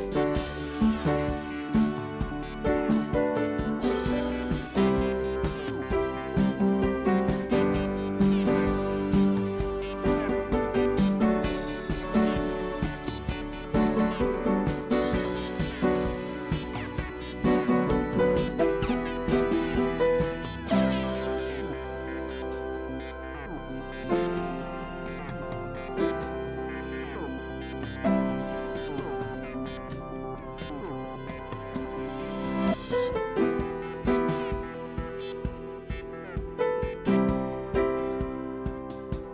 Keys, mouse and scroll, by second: 0.6 alt+click, 1.0 alt+click, 2.2 alt+shift+scroll up 1, 2.4 alt+shift+scroll, 4.9 Delete, 6.1 space, 9.3-11.1 typing, 15.2-16.3 drag, 16.3-17.8 typing, 17.6 click, 20.2-21.1 typing, 20.8 click, 23.7 shift+click, 27.8 double click, 32.1 double click, 32.6 BackSpace, 35.1 double click, 36.9 double click, 38.2 ctrl+x, 38.3 s.